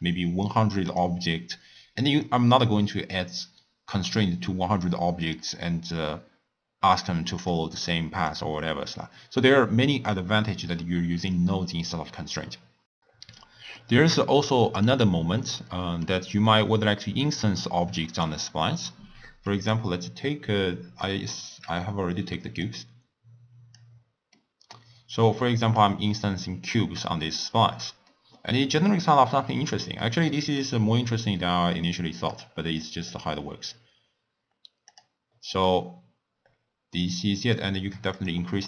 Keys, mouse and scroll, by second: 0.8 click, 2.0-5.1 drag, 7.4 click, 8.3 click, 13.3-14.0 middle drag, 14.0-14.4 scroll down 1, 14.4-16.2 middle drag, 16.2-17.3 scroll down 3, 17.3-20.3 middle drag, 21.0-21.7 middle drag, 21.7 scroll down 2, 21.8 scroll up 1, 21.8 scroll down 1, 22.6 click, 24.3-26.0 middle drag, 26.0-26.6 scroll up 1, 26.6 scroll up 1, 26.7-27.5 middle drag, 27.5-28.0 scroll down 2, 28.0-31.1 middle drag, 32.3 click, 34.8 click, 35.6-38.1 middle drag, 38.1 click.